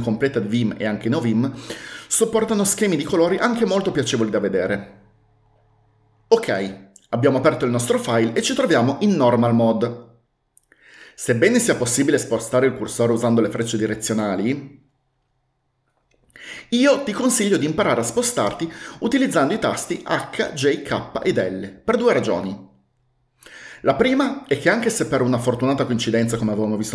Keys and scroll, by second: 12.6 Down, 12.8 Down, 12.9 Down, 13.1 Down, 13.2 Down, 13.5 Down, 13.6 Right, 13.8 Right, 13.9 Right, 14.1 Right, 14.2 Right, 14.4 Down, 14.5 Down, 14.7 Down, 14.8 Down, 15.0 Right, 15.2 Right, 15.3 Right, 15.7 Up, 15.9 Up, 16.2 Up, 16.6 Left, 16.8 Left.